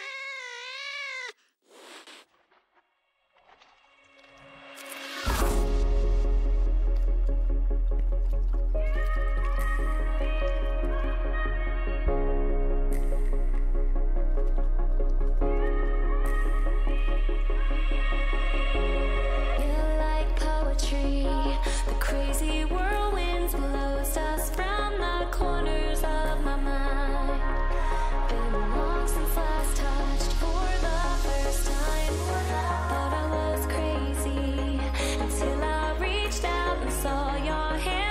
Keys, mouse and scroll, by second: 0.8 a, 1.9 b, 3.5 g, 6.2 a, 7.3 b, 8.7 g, 11.8 a, 13.8 b, 15.4 g, 20.4 a, 22.8 ctrl+r, 24.2 a, 25.3 b, 26.8 g, 28.6 a, 29.8 b, 31.4 g, 33.9 a, 36.1 ctrl+r, 37.5 a.